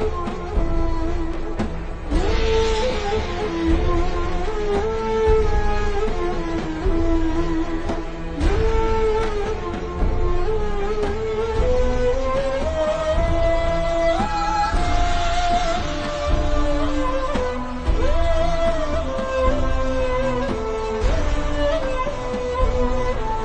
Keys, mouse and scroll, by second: 0.2 i, 0.3 click, 0.5 v, 0.7 click, 3.7 click, 3.9 v, 4.1 click, 6.2 Down, 7.1 Up, 8.0 click, 10.1 click, 11.5 click, 11.8 z, 12.0 click, 15.2 z, 15.3 click, 20.4 click, 20.7 v, 20.8 click, 22.5 click.